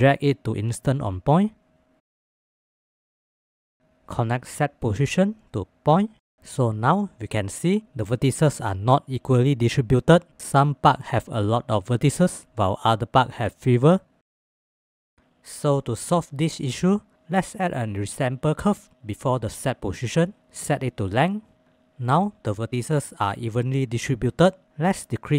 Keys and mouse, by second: 2.3 click, 16.0-17.1 drag.